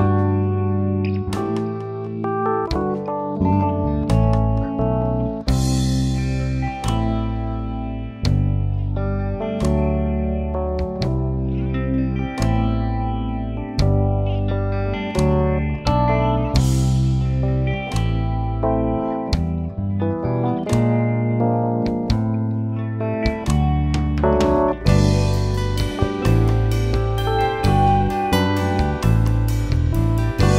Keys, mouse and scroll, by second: 0.3 alt+a, 1.5-3.4 drag, 3.4 k, 6.1 alt+a, 7.0 KP_3, 7.5-8.4 scroll up 2, 8.4 click, 8.6-9.3 scroll up 1, 9.3 click, 16.0 click, 17.6-18.2 scroll down 2, 17.8 alt+a, 18.2 middle click, 18.8-19.8 scroll up 1, 19.8 k, 22.7 alt+a, 23.5 click, 24.0 KP_3, 24.8-25.6 scroll up 2, 25.6 click, 26.3 scroll down 3, 26.5-28.6 middle drag, 28.6 k.